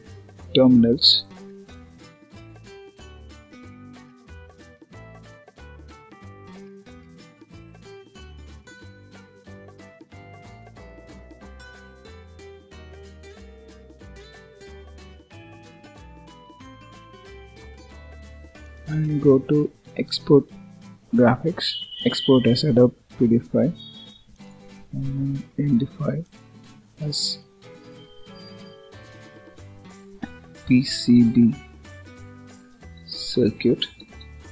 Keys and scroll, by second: 2.1 Delete, 9.6 Escape, 13.9 ctrl+s, 16.0 Return, 17.7 ctrl+s.